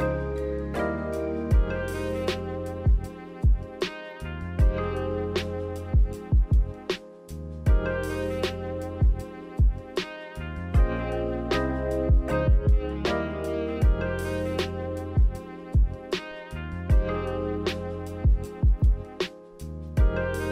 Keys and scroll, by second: 1.6-3.6 typing, 15.5 z, 19.9 z.